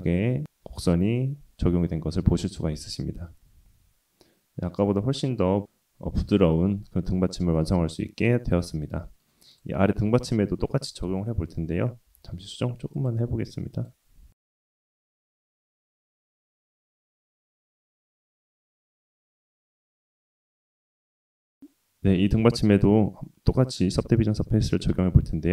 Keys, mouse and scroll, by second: 0.4 middle click, 0.5-1.8 scroll up 2, 1.8 scroll down 2, 2.4 middle click, 2.8 click, 2.8 right click, 4.8-5.7 scroll down 4, 6.4-8.2 middle drag, 8.6 shift+middle drag, 9.0 middle click, 9.5 click, 10.2 shift+click, 11.1 KP_3, 12.1 g, 13.7 click, 14.2-16.4 typing, 15.6 click, 15.8 click, 16.8 click, 17.0-17.3 middle drag, 17.4-17.8 scroll up 1, 17.8 KP_1, 18.3 shift+click, 18.5 g, 18.7 click, 18.8 g, 19.1-19.6 middle drag, 19.7 shift+click, 20.1 s, 20.6 middle drag, 21.1 click, 21.3 drag, 21.4 scroll up 2, 21.6-22.8 middle drag, 23.7-25.0 drag.